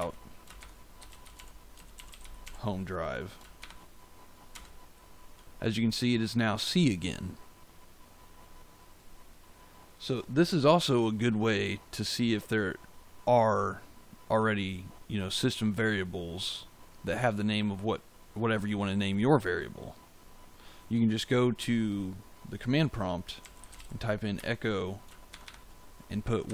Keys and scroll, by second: 0.0-3.5 typing, 4.5 Return, 23.1-25.2 typing, 26.4 Left.